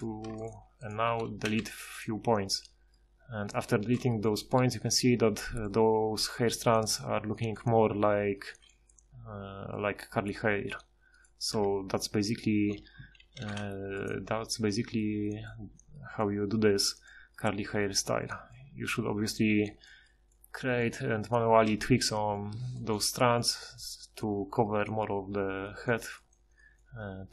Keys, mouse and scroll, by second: 1.4 x, 11.5 Tab, 13.2 ctrl+shift+h, 18.5-18.9 middle drag.